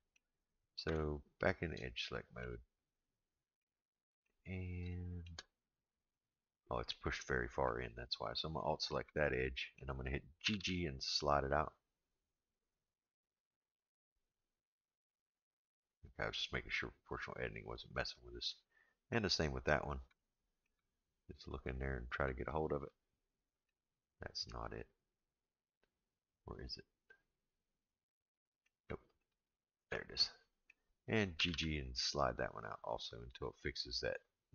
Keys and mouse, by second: 0.8 Tab, 2.0 shift+middle click, 3.6 middle click, 4.9 shift+middle click, 5.6-6.9 middle drag, 8.5 alt+click, 9.2 middle click, 10.4 g, 18.5 middle click, 20.1 middle click, 21.5 alt+click, 22.4-23.7 middle drag, 24.4-28.6 middle drag, 30.1 middle click, 31.3 g.